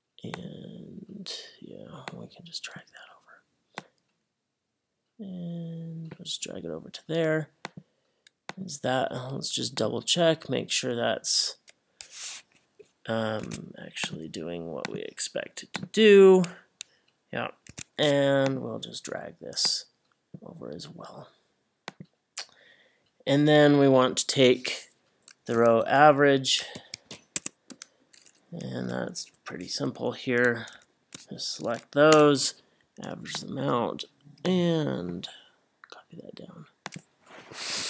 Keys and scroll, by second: 25.6 =, 26.6 a, 27.1 e, 27.4 Tab, 28.8 Left, 29.6 Left, 30.6 shift+Right, 32.1 Return.